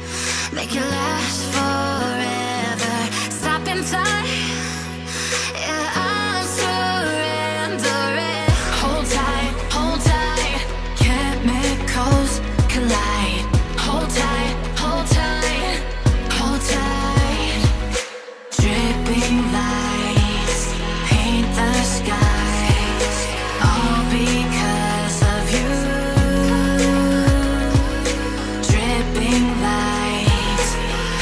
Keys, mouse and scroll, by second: 0.4 shift+middle click, 0.8-1.2 shift+scroll up 1, 1.4 scroll up 2, 1.9 middle click, 8.1 Tab, 12.2 Tab, 12.7 Tab, 13.2 Tab, 16.0 shift+middle click, 17.5-18.0 scroll up 5, 18.0-18.4 scroll down 8, 18.4 middle click, 22.5-23.0 scroll down 2, 23.0 Escape, 23.2 Escape, 23.7 shift+middle click, 26.5 shift+middle click, 27.2 middle click.